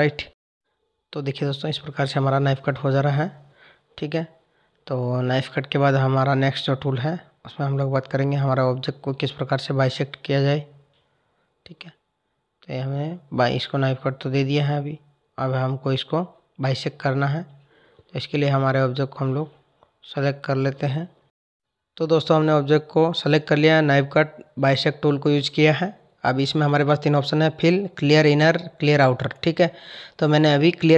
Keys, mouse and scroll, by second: 3.1 Tab, 4.1 click, 5.7 click, 6.9 Delete, 8.0 Tab, 9.6 click, 9.9 Tab, 11.3 click, 16.2 ctrl+z, 17.9 ctrl+z, 18.3 ctrl+z, 19.0 ctrl+z, 20.7 click, 22.6 click.